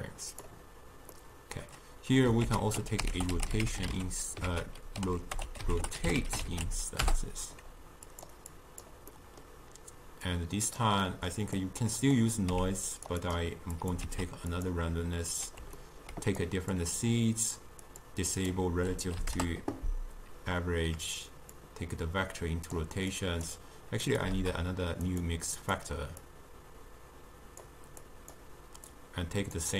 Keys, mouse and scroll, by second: 1.2-2.5 middle drag, 2.5 ctrl+a, 8.6-9.2 drag, 9.2-10.3 middle drag, 10.3 click, 11.1-11.7 middle drag, 11.7-12.6 drag, 12.6 g, 13.3-14.0 drag, 14.1 shift+d, 15.9 ctrl+middle click, 16.5-18.1 drag, 18.4-21.5 drag, 21.6-23.3 drag, 24.2 click, 24.4 shift+d, 25.6-28.2 drag, 29.0 drag.